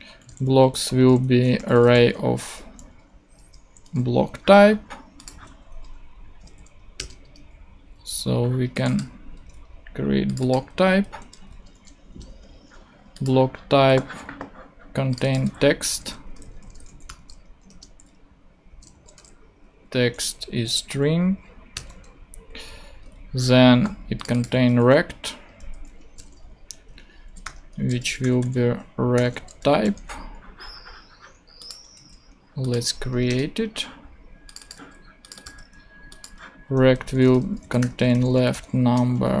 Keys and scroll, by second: 0.0 shift+super+v, 0.2 shift+super+;, 0.3-2.6 typing, 3.3 Right, 3.8 ;, 5.3 super+d, 6.3 super+Up, 6.5 super+Right, 7.0 super+Return, 7.6 Return, 11.1 shift+b, 12.0 shift+Return, 13.8 super+Tab, 15.4 super+Tab, 16.0 super+v, 16.6 shift+super+;, 16.6-17.6 typing, 17.7 Return, 19.1 ;, 21.7 Return, 23.0 super+Tab, 24.7 super+Tab, 25.6 super+v, 26.0 shift+super+;, 26.1-29.8 typing, 31.9 super+d, 33.3 Return, 34.8 super+c, 35.4 super+v, 37.1-39.4 typing.